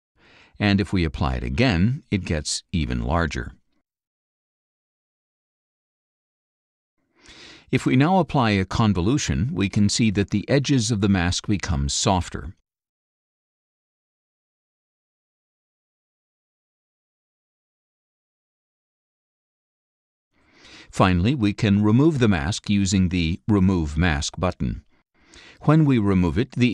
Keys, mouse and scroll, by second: 2.6 click, 5.2 click, 7.6 click, 8.7 click, 11.8-13.9 drag, 17.4-20.9 drag, 25.9 click.